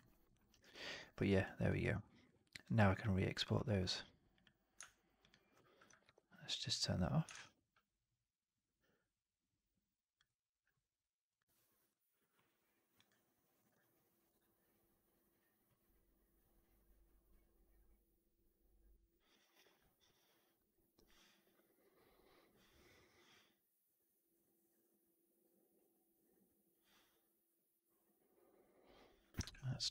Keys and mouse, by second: 0.3 right drag, 0.5 right drag, 0.6-1.0 drag, 1.0 middle drag, 1.3 click, 1.7 alt+right click, 1.9 alt+drag, 2.2 alt+right drag, 2.5-3.3 alt+drag, 5.9 alt+v, 7.2 shift+Tab.